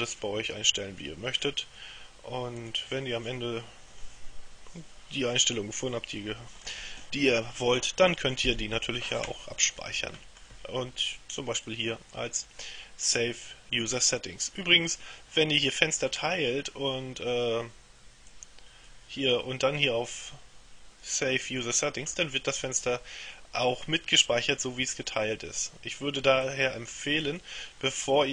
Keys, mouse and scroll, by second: 2.7 click, 9.9-11.0 middle drag, 11.7 click, 18.4 click, 20.2 click, 26.5 click.